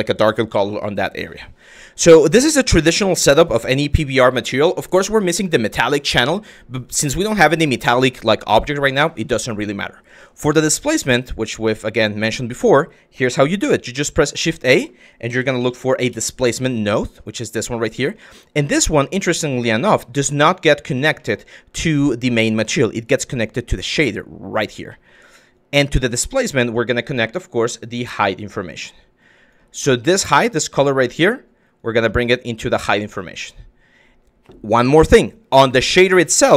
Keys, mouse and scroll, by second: 1.4 middle click, 2.3 click, 3.4 middle click, 9.8 click, 10.9-11.2 drag, 11.7 click, 12.1 click, 13.2 shift+a, 17.3 click, 18.3 click, 19.0 click, 19.5 click, 20.2 click, 20.8 middle click, 23.2-24.2 drag, 24.5 click, 25.2 click, 25.7 middle click, 28.8 click, 29.6 middle click, 30.6 click, 31.4 click, 35.6 click.